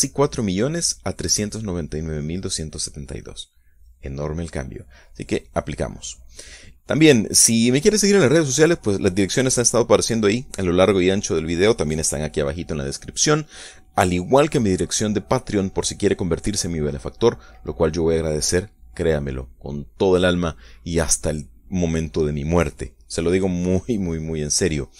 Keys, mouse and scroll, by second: 7.3 click, 14.6 right click, 21.5 scroll down 1.